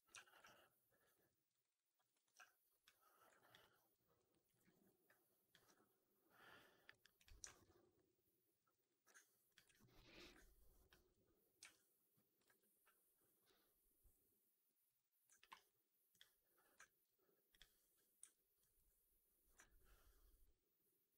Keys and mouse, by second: 0.0 4, 0.3 alt+right drag, 0.5 alt+drag, 0.9 alt+right drag, 1.2 alt+middle drag, 1.4 alt+right drag, 1.6 alt+right drag, 1.8 alt+click, 2.1 ctrl+s, 3.2 alt+drag, 3.5 alt+middle drag, 4.0 drag, 4.3 middle drag, 4.5 right drag, 4.8 alt+click, 7.3 alt+middle drag, 7.5 alt+right drag, 7.8 alt+click, 8.4 alt+middle drag, 8.7 alt+right drag, 9.4 shift+click, 9.7-10.0 alt+middle drag, 10.0 alt+right click, 11.5 q, 12.3 shift+Tab, 15.2 alt+middle drag, 15.4 alt+right drag, 16.7 alt+middle drag, 17.4 click, 18.1 2, 18.5 click, 18.6 click, 19.5 alt+right click.